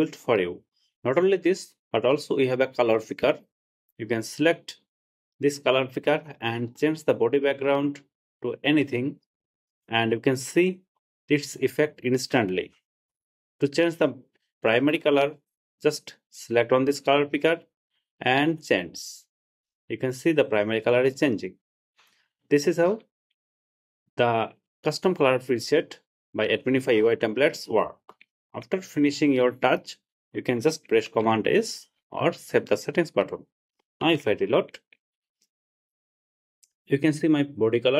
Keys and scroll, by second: 31.3 super+s, 34.3 super+r.